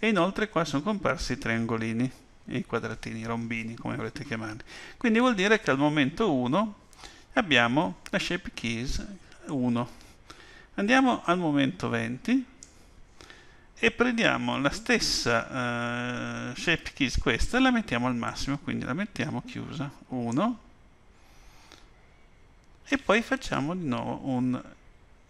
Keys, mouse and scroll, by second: 9.5 click, 18.3 click.